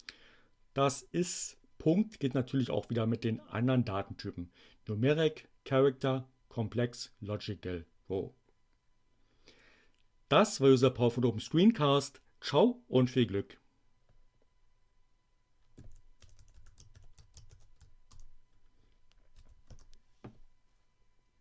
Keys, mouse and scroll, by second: 15.5-17.9 typing, 18.1 shift+Return, 19.3 n, 19.7 Return.